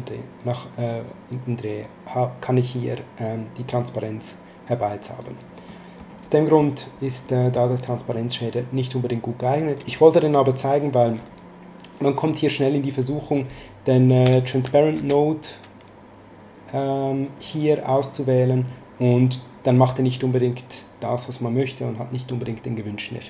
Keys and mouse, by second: 5.6 middle click, 7.3 middle click, 8.3 click, 14.2 x, 14.9 shift+a.